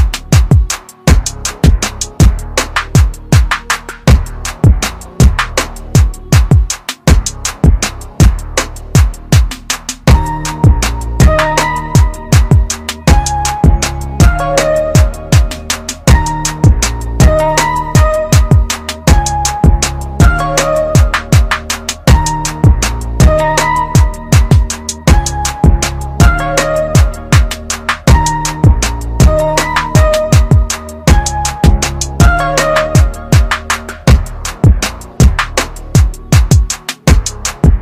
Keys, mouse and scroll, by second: 1.3 space, 1.6 click, 1.8 space, 2.8 click, 3.9 ctrl+KP_Add, 8.1-8.5 scroll up 1, 9.0 ctrl+KP_Add, 10.6 click, 13.7 alt+click, 16.5 alt+click, 18.5 click, 22.1 click, 32.7 ctrl+z, 33.2 ctrl+z, 35.2 ctrl+z.